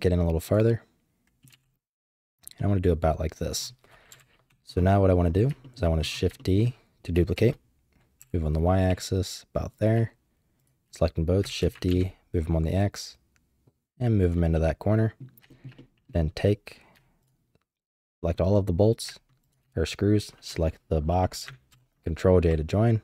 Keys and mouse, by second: 0.7 middle click, 1.4 g, 2.5 middle click, 4.1 KP_7, 5.6 shift+drag, 6.4 shift+drag, 7.3 shift+d, 10.6 shift+click, 11.6 shift+d, 14.5 click, 15.5 shift+middle drag, 15.7-16.1 middle drag, 17.2 shift+click, 18.0 shift+click, 19.5 shift+click, 21.7 ctrl+j.